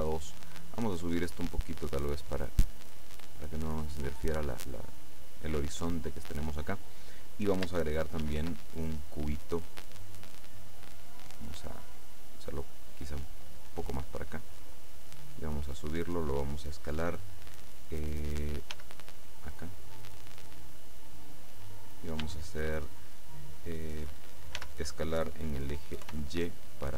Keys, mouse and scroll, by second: 1.1-3.1 drag, 3.2-4.0 drag, 8.3 shift+a, 10.0 click, 11.3-12.6 drag, 13.8-15.1 drag, 15.3-16.8 drag, 18.8 s, 21.7 click, 24.7 s, 26.2 y.